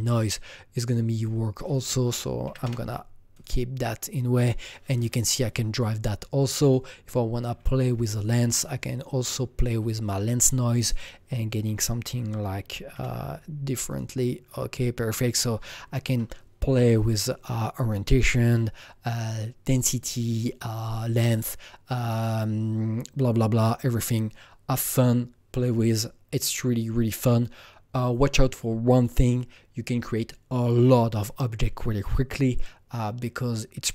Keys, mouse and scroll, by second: 0.7-2.6 drag, 2.4 KP_5, 2.6 KP_Enter, 3.3 click, 4.9 click, 6.6 click, 7.5-8.6 scroll down 6, 8.6-10.9 drag, 12.9 click, 12.9 KP_4, 15.1 click.